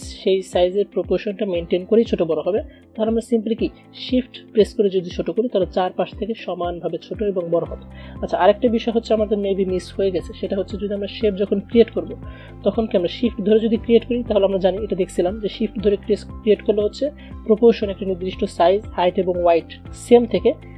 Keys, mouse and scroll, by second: 3.4 shift+Num_Lock, 3.4 click, 4.3-10.4 shift+drag, 10.4 Delete, 11.9 click, 14.2-20.7 shift+drag.